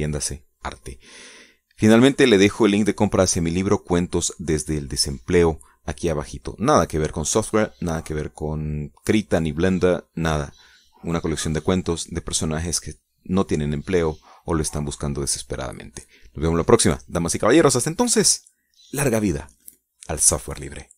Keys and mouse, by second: 0.1-1.9 drag, 1.9 middle click.